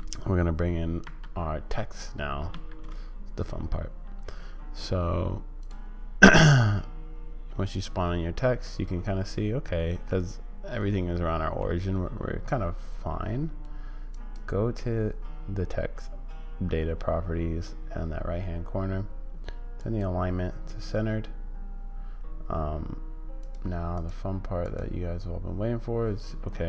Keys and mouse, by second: 2.5 shift+a, 6.4-8.6 middle drag, 10.2-11.7 middle drag, 14.2 right click, 19.9 right click, 23.4 right click, 24.0 right click, 24.6 right click.